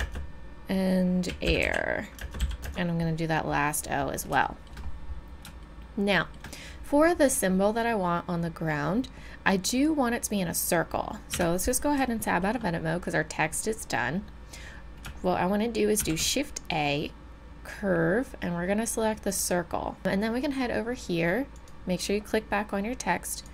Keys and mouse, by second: 0.0 space, 1.3-2.6 typing, 8.2-11.3 middle drag, 11.3 Tab, 16.0 shift+a, 21.5-23.3 right drag, 23.3-23.5 drag.